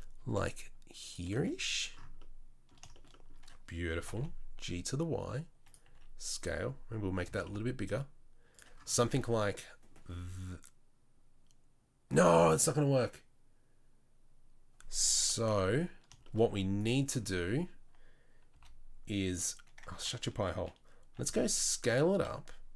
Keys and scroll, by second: 0.2 s, 1.3 z, 4.0 g, 5.8 s, 7.2 g, 8.9 Tab, 15.3 KP_3, 16.5 z, 18.5 r, 19.9 Tab, 21.2 s.